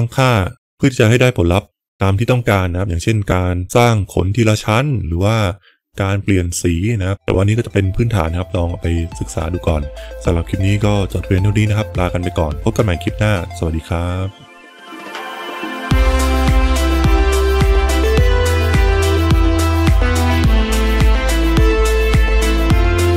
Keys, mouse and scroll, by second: 3.8-7.1 drag, 7.1 KP_0.